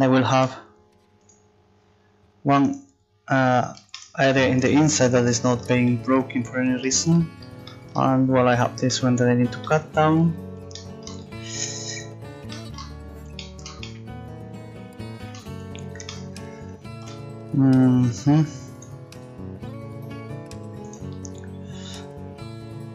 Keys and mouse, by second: 0.5 u, 2.8-11.0 right drag, 11.9 right click.